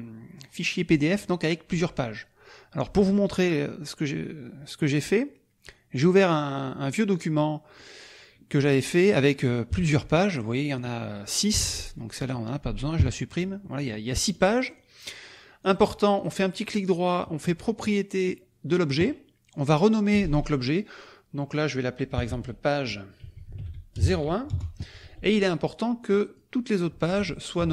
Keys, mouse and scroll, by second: 5.9 click, 6.8 click, 7.7 click, 8.6 middle click, 9.9 KP_Subtract, 10.3 middle click, 11.7 middle click, 12.2 click, 13.0 Delete, 13.6 middle click, 14.4 click, 14.6 click, 15.6 click, 16.1 right click, 18.2 click, 19.9 click, 22.1 p, 23.2 a, 23.5 g, 23.9 KP_0, 24.5 Return, 26.0 click, 27.6 ctrl+c.